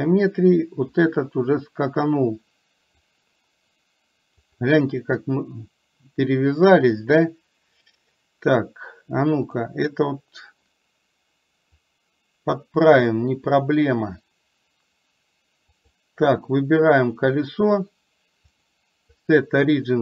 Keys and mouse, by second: 0.9-3.1 drag, 4.5 click, 11.8-14.3 drag, 15.8 click, 18.6-20.0 drag.